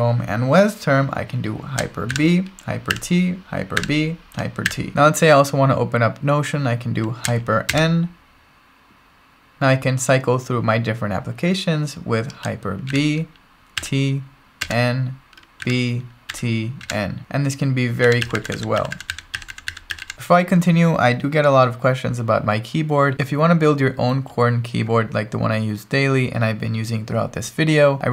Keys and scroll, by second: 2.1 ctrl+alt+shift+super+b, 2.9 ctrl+alt+shift+super+t, 3.8 ctrl+alt+shift+super+b, 4.7 ctrl+alt+shift+super+t, 4.9 super+q, 7.7 ctrl+alt+shift+super+n, 12.9 ctrl+alt+shift+super+b, 13.8 ctrl+alt+shift+super+t, 14.6 ctrl+alt+shift+super+n, 15.6 ctrl+alt+shift+super+b, 16.3 ctrl+alt+shift+super+t, 16.8 ctrl+alt+shift+super+n, 18.0 ctrl+alt+shift+super+b, 18.2 ctrl+alt+shift+super+t, 18.5 ctrl+alt+shift+super+n, 18.5 ctrl+alt+shift+super+b, 18.8 ctrl+alt+shift+super+t, 19.0 ctrl+alt+shift+super+n, 19.1 ctrl+alt+shift+super+b, 19.4 ctrl+alt+shift+super+t, 19.5 ctrl+alt+shift+super+n, 19.7 ctrl+alt+shift+super+b, 19.9 ctrl+alt+shift+super+t, 20.0 ctrl+alt+shift+super+n.